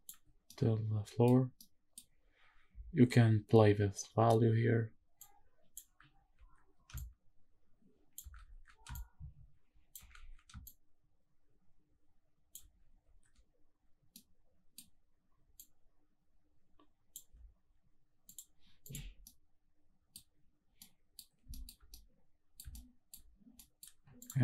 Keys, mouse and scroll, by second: 0.5-1.2 middle drag, 1.4 scroll down 1, 1.5-1.9 middle drag, 5.2 click, 6.3 ctrl+z, 6.9-8.2 shift+drag, 8.6 ctrl+z, 8.9-9.9 shift+drag, 10.3 ctrl+z, 10.6-12.5 shift+drag, 13.0 ctrl+z, 14.1 middle click, 15.6-17.2 shift+drag, 18.3 click, 18.8 click, 19.2-20.1 middle drag, 20.3-20.8 scroll up 2, 20.8-21.2 middle drag, 21.5 shift+middle click, 21.9-22.5 middle drag, 22.7-23.1 shift+middle drag, 23.3-23.7 scroll up 2, 23.7 middle click, 24.2 click.